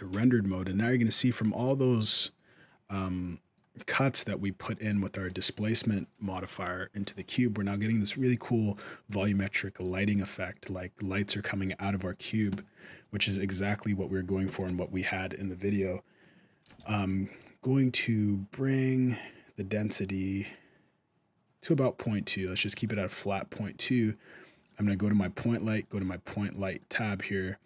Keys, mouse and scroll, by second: 2.1 middle click, 3.8 middle click, 5.2-6.0 scroll up 1, 6.0-6.3 scroll down 1, 6.3 middle click, 7.1 middle click, 7.6 scroll down 1, 7.9 middle click, 10.0 middle click, 11.5 scroll up 1, 11.6 middle click, 12.3 middle click, 17.1 shift+click, 22.5 click, 24.4 click, 25.7 click, 26.5 click, 27.5 click.